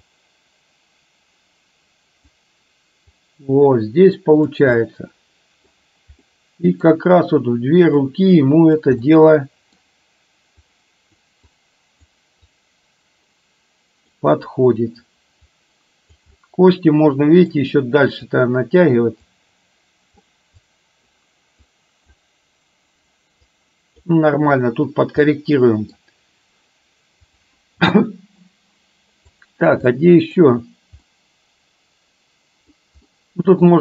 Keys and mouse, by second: 0.1-2.5 drag, 3.1-4.6 drag, 4.9 middle click, 6.4 middle click, 8.0 click, 9.0 middle click, 10.9 click, 11.6 click, 12.5-14.1 drag, 15.6 click, 16.4-17.6 middle drag, 18.4 click, 19.4 click, 20.8 click, 21.8 click, 23.5 click, 25.4 middle click, 27.3 click, 29.4 click, 29.9-30.5 middle drag, 31.1-32.9 middle drag, 33.1-33.6 middle drag.